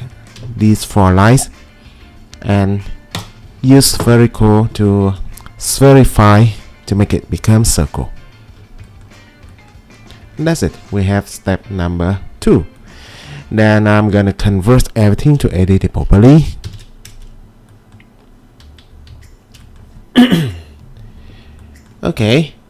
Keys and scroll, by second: 16.7 ctrl+shift+g, 19.1 q.